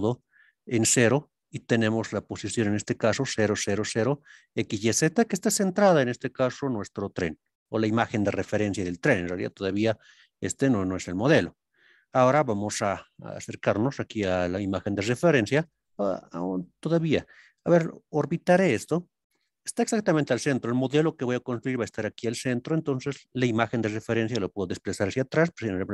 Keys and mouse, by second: 14.2 click, 15.6-16.6 drag, 17.5-19.2 middle drag.